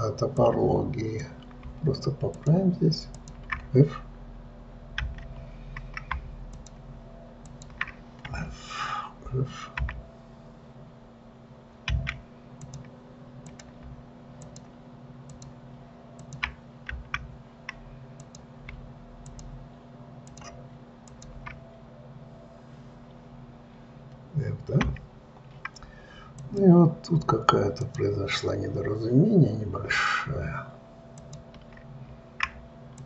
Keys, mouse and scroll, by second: 0.6-2.8 drag, 3.5 shift+click, 5.3 f, 6.8 shift+click, 7.8 shift+click, 8.6 f, 13.0 click, 13.8 click, 14.8 shift+click, 15.6 shift+click, 16.6 shift+click, 17.3 f, 18.5 click, 19.6 shift+click, 20.6 shift+click, 21.4 shift+click, 26.8 click, 28.2 shift+click, 31.5 shift+click.